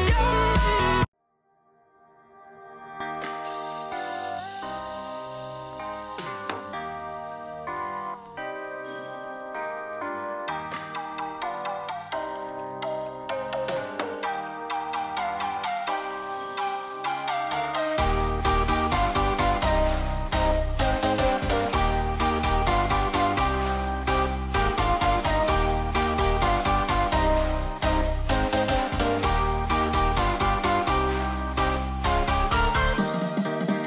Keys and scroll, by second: 1.4 Escape, 5.4 super+c, 6.6 shift+super+v, 16.6 super+-, 27.0 alt+Down, 27.3 alt+Down.